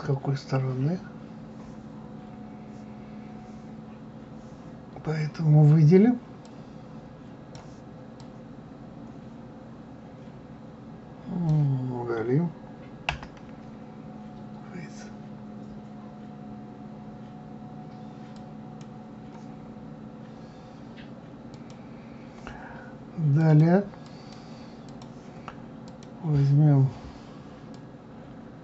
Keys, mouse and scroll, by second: 6.4-11.3 drag, 19.8-21.5 scroll up 1, 21.5 click, 23.4 click, 24.0 click, 24.9 click, 25.9 click, 27.7-28.6 drag.